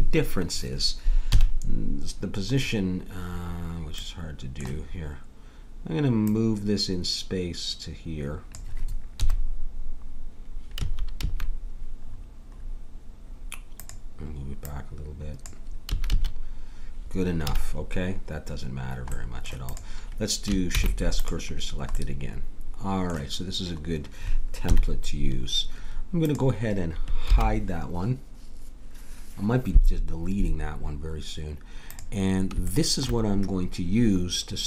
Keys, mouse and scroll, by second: 1.3 KP_3, 6.3-8.1 drag, 9.2 KP_3, 10.7 a, 11.2 a, 14.6-16.3 drag, 15.9 a, 16.1 a, 17.4 a, 19.7-20.7 drag, 20.7 shift+s, 24.6 KP_1, 26.2-28.0 drag, 27.3 h, 31.9-33.9 drag, 32.7-33.9 right drag, 33.9 middle click.